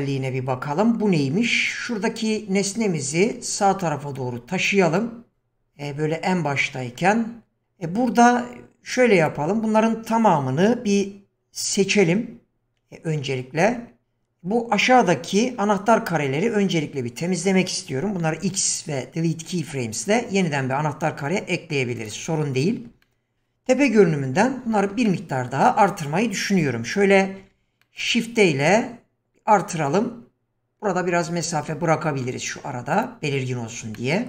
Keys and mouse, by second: 2.2-3.1 drag, 5.0 click, 9.2 click, 13.6 q, 18.3 x, 23.1 shift+middle drag, 23.9 KP_7, 25.2 shift+middle click, 27.4 shift+d, 33.9-34.2 shift+middle drag.